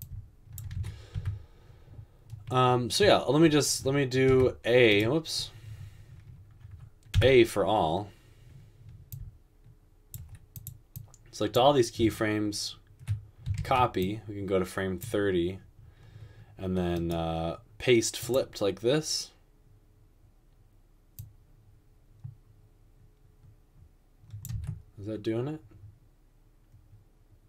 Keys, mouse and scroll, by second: 1.2 a, 4.3 typing, 7.2 typing, 13.6 ctrl+c.